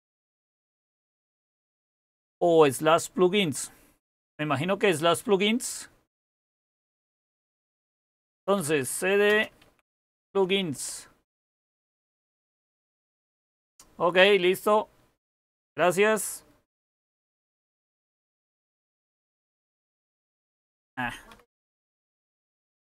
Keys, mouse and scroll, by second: 0.0-2.0 typing, 8.1-9.9 typing, 10.1 Tab, 10.7 Return, 17.2-19.6 typing, 17.7 Return, 19.7 Return, 21.0-22.8 typing.